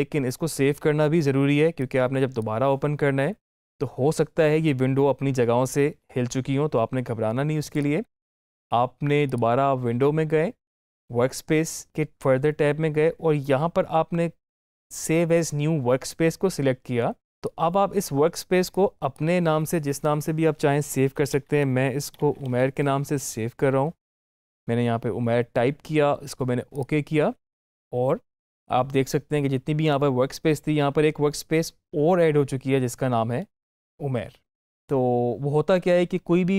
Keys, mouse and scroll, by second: 7.6 click, 17.2-21.2 drag, 21.2-22.4 typing, 26.6 click.